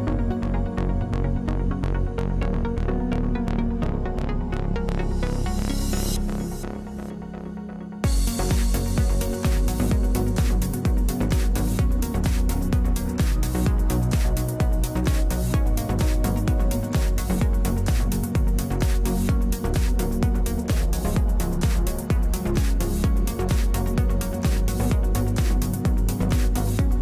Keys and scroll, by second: 0.6 ctrl+space, 3.1 ctrl+space.